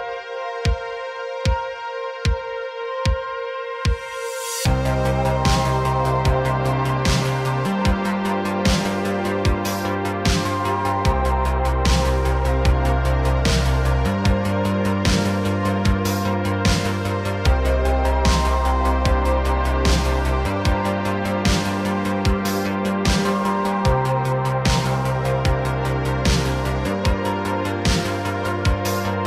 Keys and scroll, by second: 2.9 s, 3.0 y, 6.0 s, 6.2 y, 7.9 space, 13.4 s, 16.0 s, 21.8 space, 24.8 x, 26.2 x, 26.8 x, 27.9 a, 28.5 KP_Decimal.